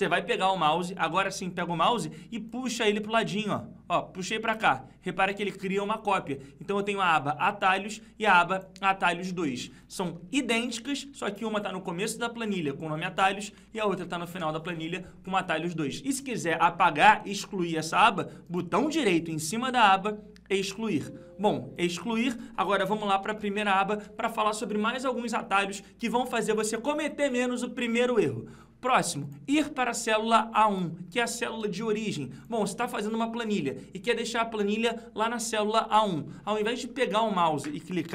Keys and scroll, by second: 10.3 ctrl+Page_Up, 13.1 ctrl+Page_Down, 22.9 ctrl+Page_Up.